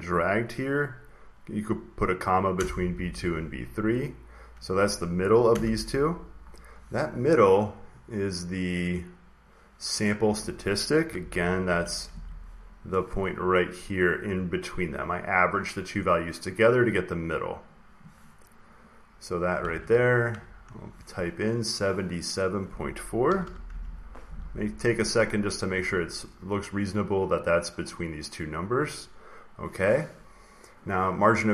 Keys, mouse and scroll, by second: 2.4 Return, 3.8 click, 3.9 click, 5.4 Return, 6.4 click, 7.7 click, 10.3 click, 11.0 alt+Tab, 11.5 alt+Tab, 12.0 alt+Tab, 12.7 alt+click, 13.9 click, 14.6 click, 15.3 click, 15.9 click, 16.9 click, 18.7 click, 19.6 alt+Tab, 20.2 alt+Tab, 22.4 click, 23.0-24.1 typing, 25.2 click, 26.3 click, 26.7 click, 27.2 click, 27.8 click.